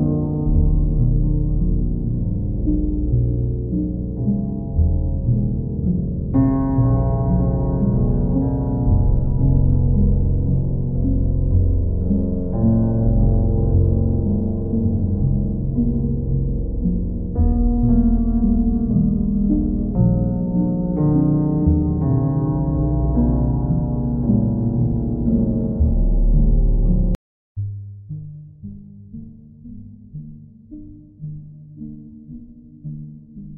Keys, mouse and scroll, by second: 0.0 click, 0.8 ctrl+click, 1.1 q, 2.1 click, 2.3 shift+click, 3.0 alt+click, 8.1 click, 8.8 alt+click, 9.3 click, 9.6 shift+click, 10.3 alt+click, 12.3 ctrl+click, 13.3 ctrl+click, 14.9 w, 18.2-19.5 alt+drag, 21.8 click, 23.8 ctrl+click, 24.5 ctrl+click, 24.8 ctrl+z, 26.3 ctrl+click, 26.5 ctrl+z, 28.4 ctrl+click, 29.1 ctrl+click, 30.7 q, 31.3 ctrl+click, 32.6 ctrl+click, 33.2 ctrl+click.